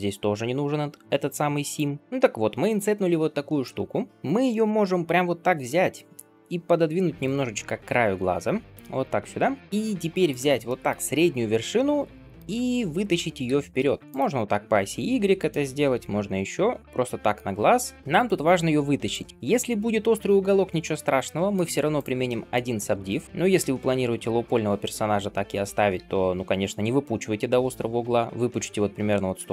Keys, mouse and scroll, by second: 2.0 middle click, 2.0-3.1 scroll down 1, 3.3 shift+middle click, 4.3-5.5 middle drag, 5.5 g, 7.4-8.3 middle drag, 8.3 g, 9.2-9.8 middle drag, 10.1-11.6 drag, 11.6 middle click, 13.3 g, 14.2-15.8 middle drag, 15.8 g, 16.8 middle click, 17.4 g, 19.3-21.8 middle drag, 21.8 click, 22.3 middle click, 22.7 g, 23.7-25.8 middle drag, 25.8 g, 29.2 middle click.